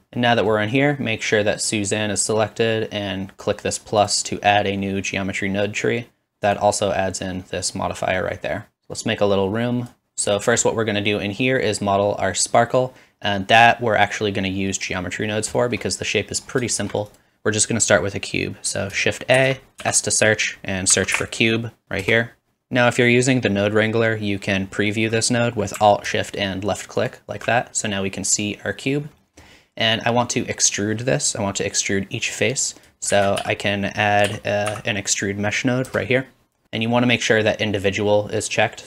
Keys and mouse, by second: 4.1-6.5 drag, 8.7 click, 11.3-27.4 drag, 11.3-17.2 middle drag, 11.3-17.2 right drag, 19.4 shift+a, 27.0 alt+shift+right click, 33.1 shift+a.